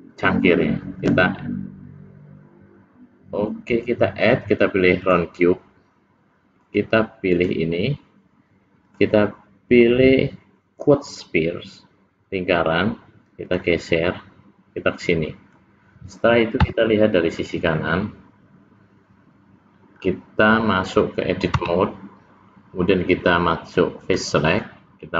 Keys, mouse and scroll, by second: 1.0 click, 7.5 click, 8.8 click, 13.5 click, 14.8 click, 21.8 Tab, 24.1 click.